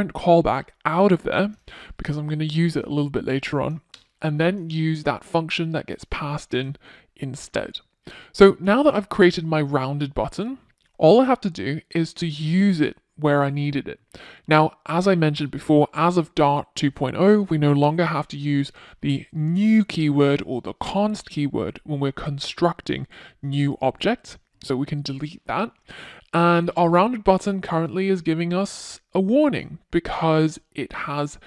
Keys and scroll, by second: 1.6 super+x, 4.9 super+x, 7.2 Return.